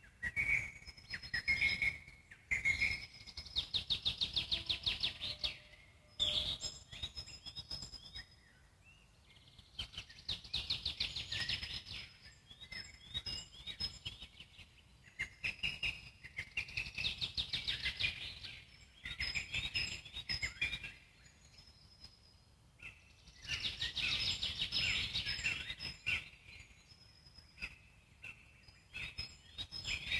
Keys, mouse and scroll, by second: 0.3 alt+middle click, 0.8 `, 1.5 scroll down 2, 1.7-3.8 alt+middle drag, 3.8 click, 4.4 click, 5.2 g, 6.1 click, 6.9 g, 7.5 alt+middle click, 8.5 click, 9.3 g, 10.2 click, 10.5 alt+middle click, 11.5 g, 12.5-13.7 scroll down 10, 13.7-15.4 alt+middle drag, 15.4-15.8 scroll down 2, 15.8 click, 16.2-18.2 alt+middle drag, 18.2-18.6 scroll up 2, 18.6-20.6 alt+middle drag, 20.6-23.0 drag, 23.0-23.6 middle drag, 23.6-24.3 scroll down 1, 24.3-25.4 alt+middle drag, 25.4 click, 28.2 Escape, 28.6 click, 28.8-30.1 drag.